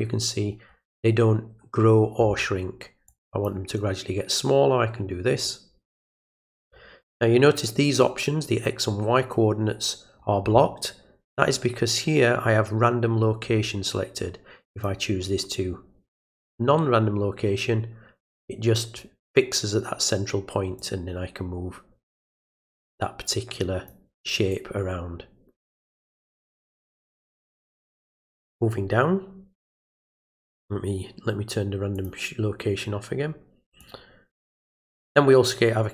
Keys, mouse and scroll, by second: 3.1 click, 5.4-6.7 drag, 14.7 click, 20.8-23.9 drag, 24.5-26.7 drag, 31.9 click, 33.8 click.